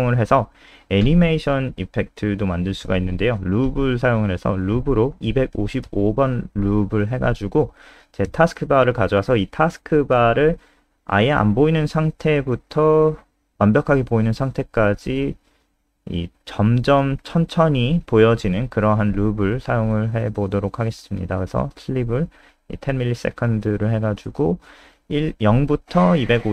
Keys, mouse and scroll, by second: 0.0 click, 0.2-0.9 scroll down 2, 2.1 ctrl+c, 2.3 click, 3.6 shift+Home, 3.9 shift+Up, 4.0 shift+Up, 4.2 shift+Up, 4.3 shift+Up, 4.8 shift+Down, 5.1 ctrl+v, 5.3 ctrl+s, 6.0 click, 6.3 alt+F4, 6.6 click, 17.9 ctrl+s, 19.3 click.